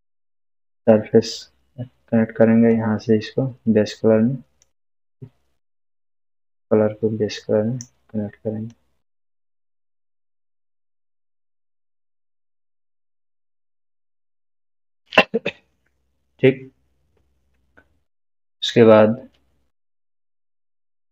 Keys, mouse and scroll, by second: 2.7-4.9 drag, 15.9-16.6 scroll down 1, 18.8-20.0 drag.